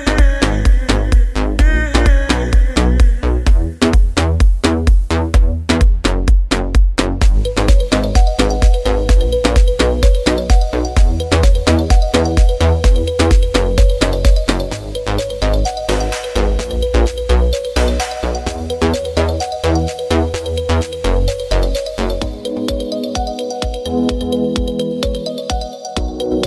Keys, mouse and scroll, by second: 1.6 click, 7.1 click, 11.7 click, 22.1 click, 25.2 click.